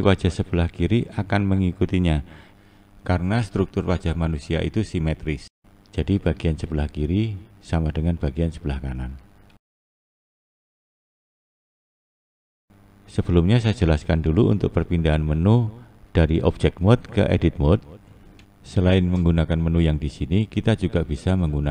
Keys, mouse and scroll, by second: 0.7-2.2 scroll up 1, 2.2-5.2 scroll down 1, 6.5 click, 7.8 click, 19.3-21.7 drag.